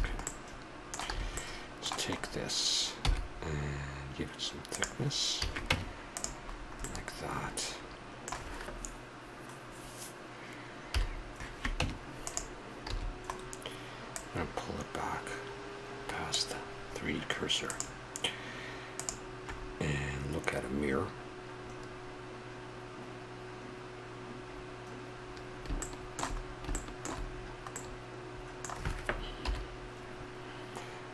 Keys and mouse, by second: 1.1 a, 3.0 e, 5.3 a, 5.7 Tab, 6.5-7.6 middle drag, 10.9 KP_7, 11.8 Tab, 12.8 a, 14.3-16.1 drag, 17.6-19.5 drag, 19.5-29.4 middle drag, 29.4 KP_7.